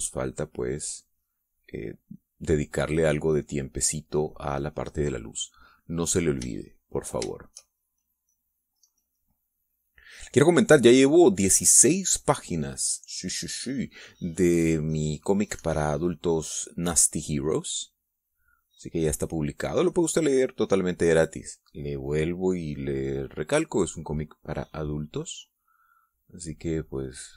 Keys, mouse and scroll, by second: 7.9-14.3 shift+drag, 16.1-20.0 drag, 20.2-23.0 drag, 25.7-27.3 drag.